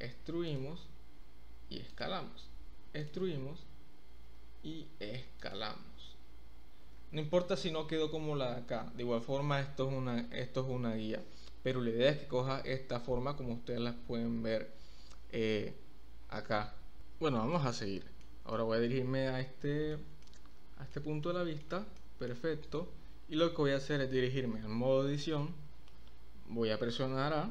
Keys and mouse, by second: 0.4 click, 0.6 s, 1.9 click, 2.1 e, 3.3 s, 5.4 click, 6.9 Tab, 17.5-18.2 middle drag, 18.6-19.9 middle drag, 20.2-21.0 middle drag, 21.2-21.6 middle drag, 22.0-22.3 middle drag, 22.7 click, 25.1 Tab, 27.4 a.